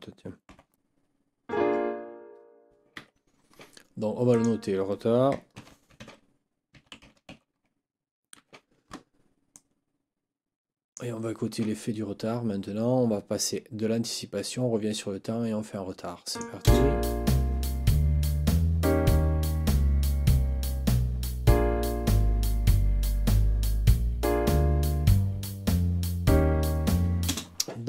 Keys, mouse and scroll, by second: 0.2-1.2 typing, 3.0 Escape, 4.3 click, 5.6 ctrl+t, 5.9 ctrl+r, 6.5-7.7 typing, 8.4 Escape, 9.5-11.1 drag, 16.3 click, 16.6 space, 27.2 space.